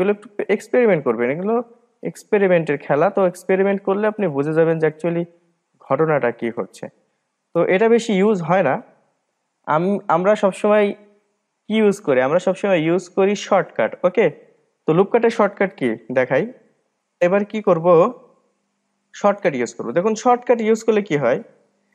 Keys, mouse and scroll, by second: 0.0-3.1 drag, 4.2-4.6 scroll up 1, 4.7-6.6 middle drag, 6.6-7.2 scroll down 2, 13.7 click, 14.2-14.6 scroll up 2, 14.6 scroll down 3, 15.0-17.7 middle drag, 17.7-20.0 scroll up 3.